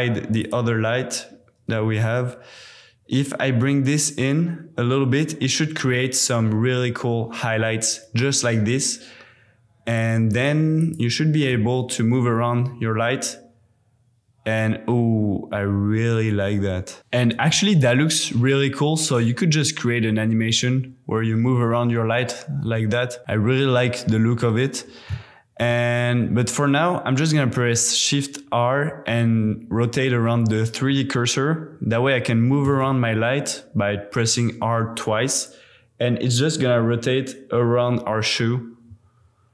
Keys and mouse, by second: 0.4 click, 3.2-5.8 drag, 9.9 click, 10.8 click, 12.7 g, 17.4 g, 17.5 x, 24.5 click, 25.7 shift+r, 32.6 r, 32.8 r.